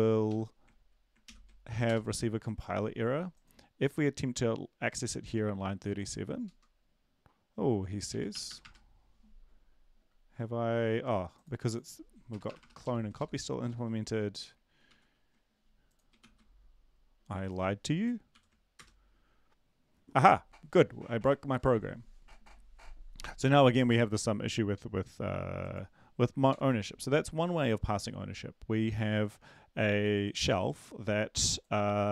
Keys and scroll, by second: 0.3 Up, 1.8 ctrl+;, 1.8 Return, 6.4 Return, 8.1 Up, 8.3 BackSpace, 8.5 BackSpace, 8.6 BackSpace, 12.3 BackSpace, 12.5 BackSpace, 12.6 BackSpace, 12.8 ctrl+shift+Left, 13.6 shift+Left, 14.1 BackSpace, 14.9 ctrl+a, 16.2 ctrl+s, 18.3 ctrl+l, 18.7 Return, 26.5 ctrl+l.